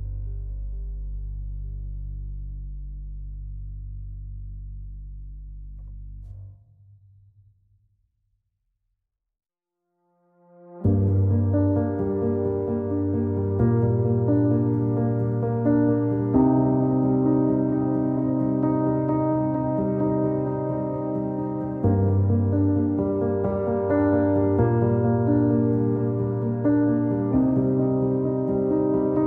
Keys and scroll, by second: 19.8 z, 20.6 alt+x, 21.1 q.